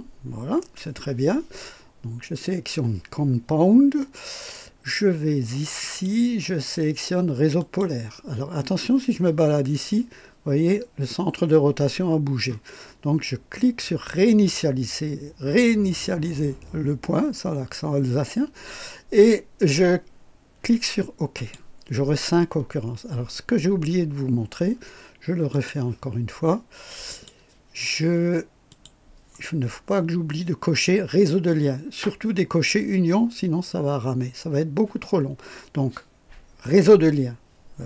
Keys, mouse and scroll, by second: 5.8 click, 7.6 click, 14.2 click, 21.3 click, 25.5 click, 27.1 click, 28.7 click.